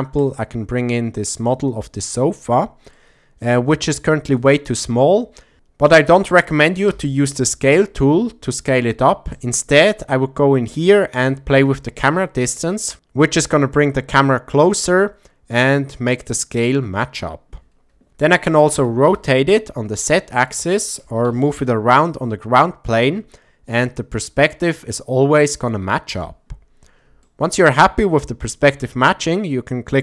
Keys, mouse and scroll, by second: 0.2 click, 1.4 drag, 2.5 shift+middle click, 6.9 s, 9.3 right click, 11.4-16.6 drag, 18.7 r, 19.1 z, 20.5 click, 21.0 g, 21.7 shift+z, 25.6 click, 27.2-27.6 shift+middle drag.